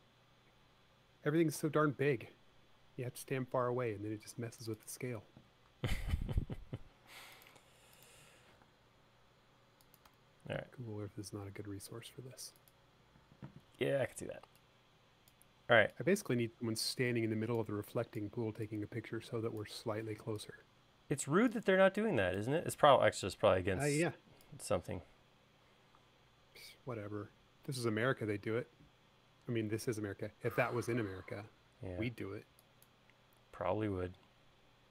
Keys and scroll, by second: 2.5 space, 6.9 e, 7.6 space, 9.0 m, 13.5 e, 31.1 l.